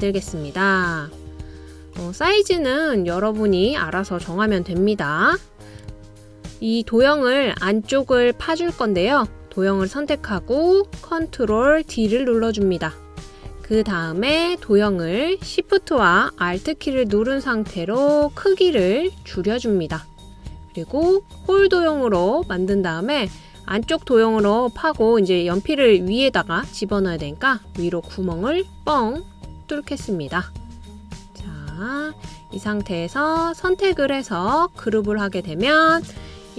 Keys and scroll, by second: 10.4 super+o, 12.0 space.